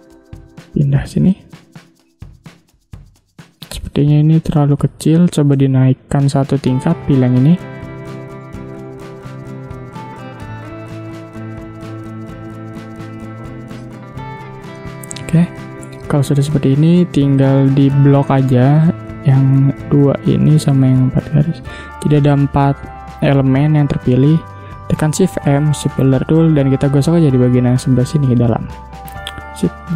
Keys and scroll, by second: 1.3 space, 3.1 space, 4.9 Delete, 5.6 space, 8.7 space, 11.0 space, 22.9 space, 23.8 ctrl+z, 25.2 shift+m, 29.6 v.